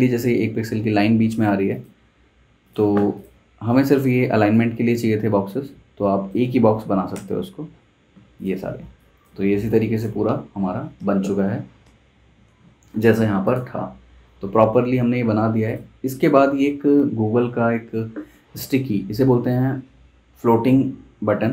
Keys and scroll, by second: 7.1 super+[, 8.8 space, 11.0 super+Tab, 12.0 super+Tab.